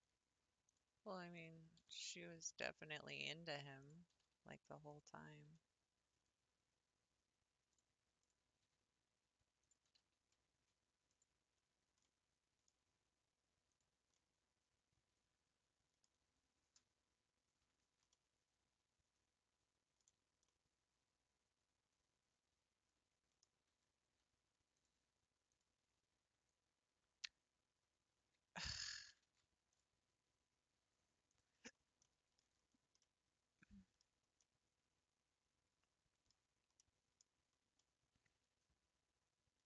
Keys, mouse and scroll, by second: 1.3 click, 1.8 g, 3.8 click, 4.1 g, 4.9 click, 5.3 g, 5.4 g, 8.2 click, 8.8 r, 9.9 g, 11.7-12.1 scroll down 2, 12.1-13.8 middle drag, 13.8 click, 14.2-17.3 middle drag, 17.8 Tab, 18.1-20.2 middle drag, 20.2 scroll up 3, 20.5-23.5 middle drag, 23.7 Tab, 24.7 click, 25.5 click, 26.5 click, 29.2 ctrl+v, 31.3 click, 32.0 middle click, 32.4 Tab, 32.7 scroll down 3, 33.2-34.1 middle drag, 34.1 scroll up 3, 34.5-36.3 middle drag, 36.3 scroll down 2, 36.8-37.1 middle drag, 37.1 scroll down 3, 37.8-39.6 middle drag.